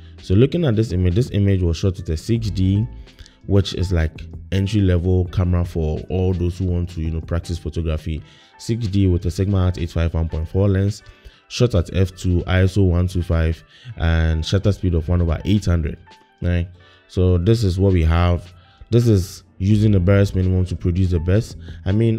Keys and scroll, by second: 1.5 i.